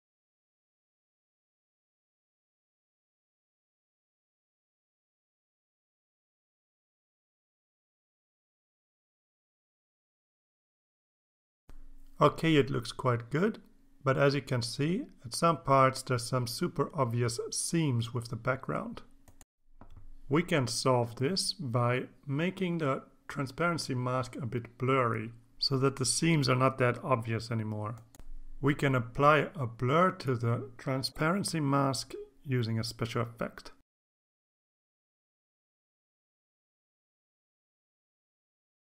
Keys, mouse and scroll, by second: 13.3 click, 34.1 click, 35.6 click, 36.4-37.6 drag, 38.7 click.